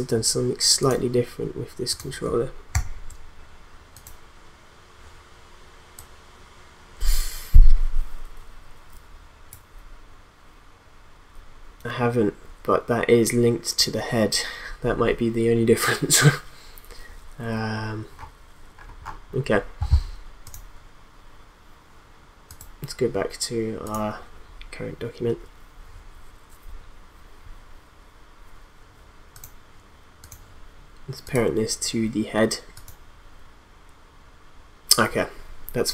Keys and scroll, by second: 2.7 p.